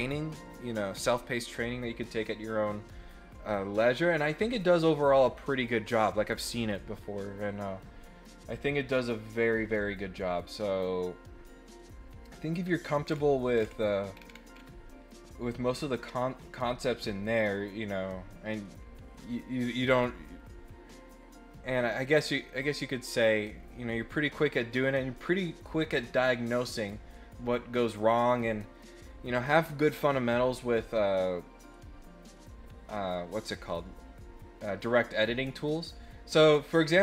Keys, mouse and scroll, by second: 0.9 scroll down 2, 12.6 scroll up 4, 13.0 scroll down 2, 13.5 scroll down 2, 14.1 scroll down 4, 14.5 scroll up 2, 15.1-16.9 middle drag, 17.0 middle click, 36.3 middle click.